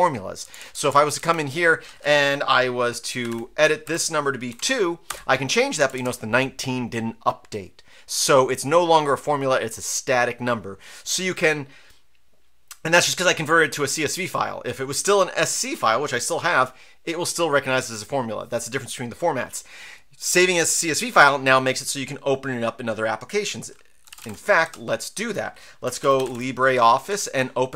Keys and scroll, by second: 0.4 Down, 0.6 Down, 0.8 Down, 0.9 Right, 1.2 Up, 3.0-5.0 typing, 3.8 Delete, 5.1 Return, 5.8 Down, 5.9 Down, 23.8-26.8 typing, 27.1 Right.